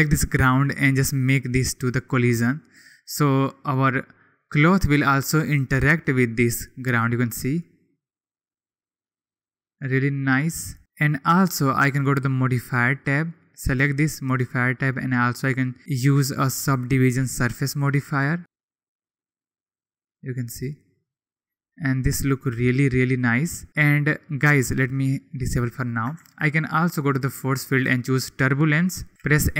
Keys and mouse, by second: 1.8 click, 9.3-10.8 drag, 10.9 click, 13.5-17.8 drag, 24.9-26.0 middle drag, 26.1 shift+a, 29.1 m.